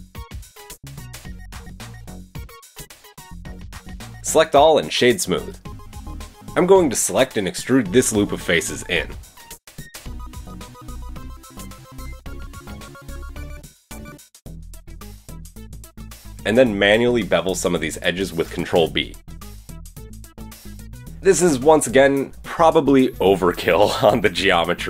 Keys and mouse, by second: 0.0 shift+middle click, 0.5-2.3 shift+middle drag, 1.5 g, 3.1 Tab, 3.7 Tab, 4.1-5.4 middle drag, 4.4 Tab, 4.6 Tab, 4.7 a, 5.4-6.3 drag, 7.9 alt+click, 10.5 e, 10.7 click, 11.2 g, 12.8 Tab, 12.8-13.6 middle drag, 14.4 Tab, 15.7 click, 16.3-18.5 alt+drag, 19.4 ctrl+b, 21.0-23.4 drag, 23.4 Tab, 24.4 Tab.